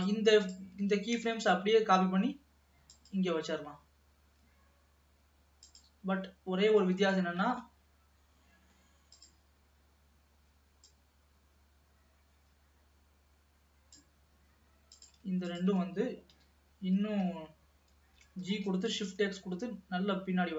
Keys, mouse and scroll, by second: 0.2-1.2 drag, 1.2 shift+d, 5.8 click, 7.9-9.3 middle drag, 9.3 click, 11.1-14.2 drag, 15.1 click, 15.7 shift+click, 16.4 KP_3, 18.6 g.